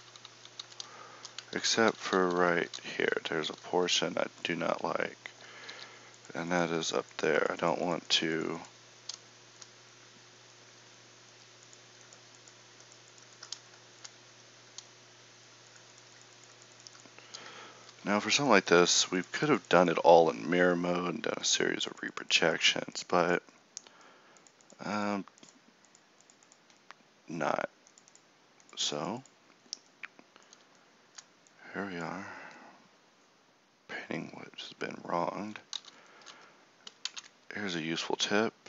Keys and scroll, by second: 0.0 ctrl+z, 0.1 ctrl+z, 0.2 ctrl+z, 0.4 ctrl+z, 1.6 ctrl+z, 1.8 ctrl+z, 2.0 ctrl+z, 2.2 ctrl+z, 2.4 ctrl+z, 2.6 ctrl+z, 2.8 ctrl+z, 3.0 ctrl+z, 3.6 ctrl+z, 5.6 f, 35.8 ctrl+z, 36.3 Tab, 38.0 ctrl+Tab.